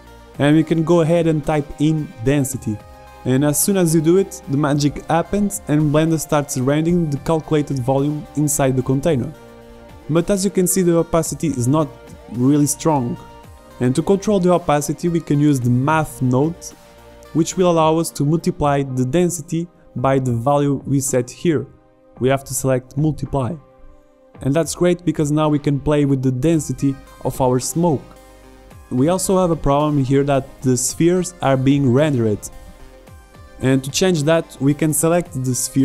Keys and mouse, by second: 5.6 click, 7.6 shift+a, 32.8 z, 33.5-35.0 right drag, 35.0 z.